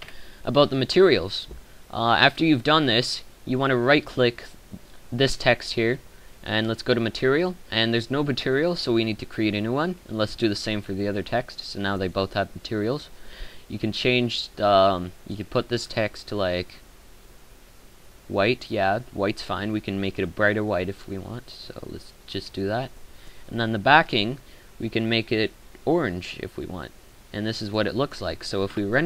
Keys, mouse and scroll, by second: 0.0 Escape.